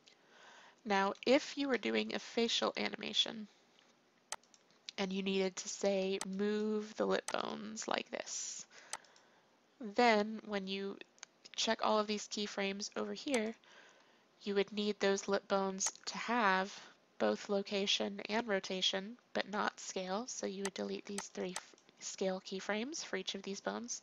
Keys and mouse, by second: 0.0-1.8 drag, 4.3-6.2 drag, 5.8 a, 6.2 b, 6.9 r, 7.6 g, 13.4-15.2 drag, 15.9-24.0 drag.